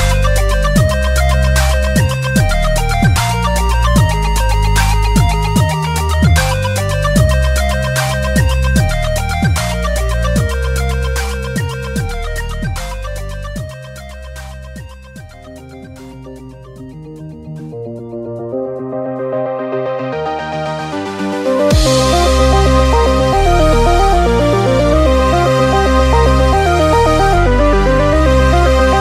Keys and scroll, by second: 8.7 super+-, 18.4-19.9 typing, 27.8-28.7 typing.